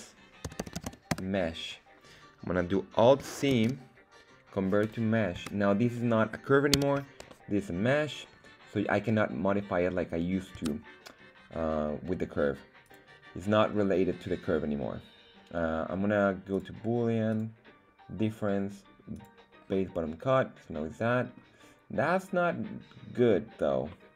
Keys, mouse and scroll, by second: 3.5 alt+c, 5.3 Tab, 5.9 middle click, 6.7 z, 7.2-10.5 middle drag, 10.7 Tab, 12.8-16.6 drag, 17.2-19.2 drag, 19.6-21.4 middle drag, 23.8-24.1 middle drag.